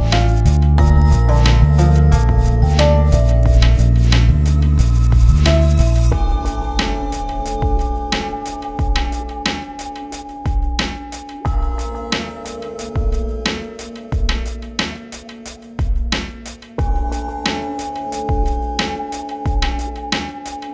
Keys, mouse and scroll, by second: 1.5 r, 3.6-4.3 typing, 6.7 click, 8.1 F10, 9.1 click, 10.0 ctrl+space, 10.6 F8, 11.3 click, 12.0 End, 14.7 ctrl+space, 16.5-17.9 drag, 17.9 Up, 19.3 shift+click, 19.5 c, 19.7 click, 20.4-20.7 drag.